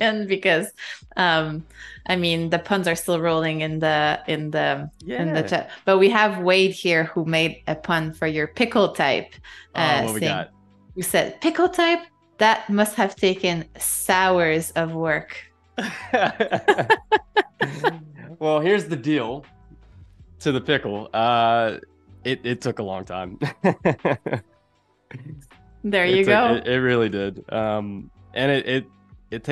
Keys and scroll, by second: 3.1 shift+c, 5.4 space, 8.0 super+u, 12.3 space, 13.7 a, 15.2 space, 23.2 =, 27.1 a.